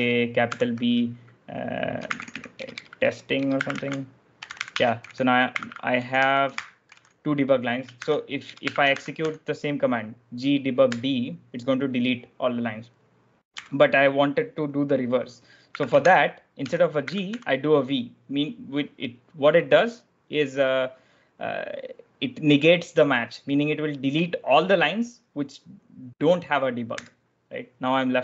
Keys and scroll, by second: 0.0-0.4 typing, 1.9-9.6 typing, 10.8 Return, 13.4 u, 15.4-17.7 typing, 26.9 Return.